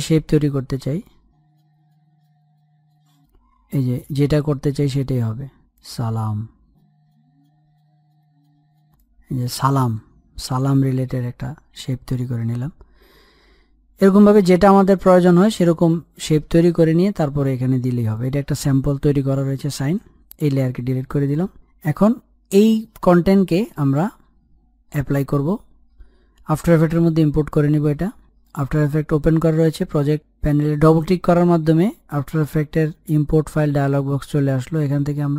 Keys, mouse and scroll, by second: 5.7-10.5 drag, 10.5 ctrl+z, 12.0 click, 14.6 Delete, 14.9 click, 15.3 Delete, 15.7 click, 17.1 Delete, 18.1 click, 26.9-35.3 drag.